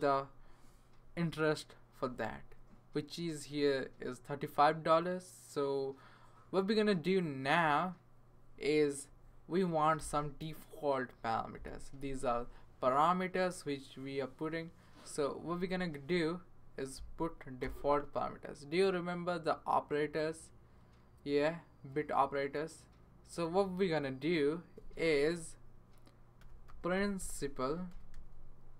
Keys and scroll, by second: 17.6 Return, 26.2-28.4 typing.